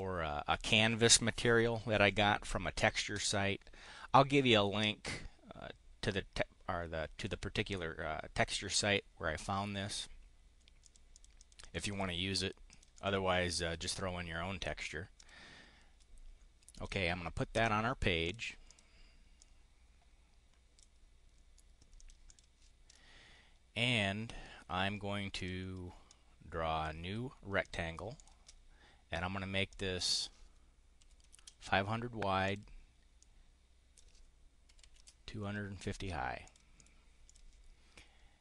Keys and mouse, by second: 10.7 click, 11.1 click, 11.3 click, 11.5 click, 12.6 click, 12.9 click, 15.1 click, 16.7 click, 18.2 click, 18.6 click, 19.3-20.8 drag, 21.9 click, 22.1 click, 22.7 click, 25.3 click, 25.9 click, 27.5 click, 28.1 click, 29.6 click, 30.9 5, 31.3 0, 32.3 click, 33.1 click, 34.3-35.4 typing, 36.3 click, 36.7 click, 37.1 click.